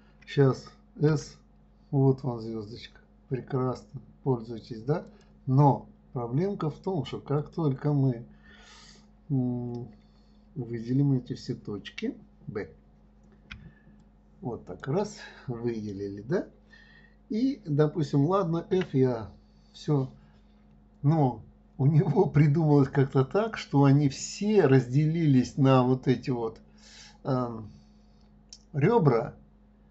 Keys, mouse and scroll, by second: 1.1 s, 7.3 click.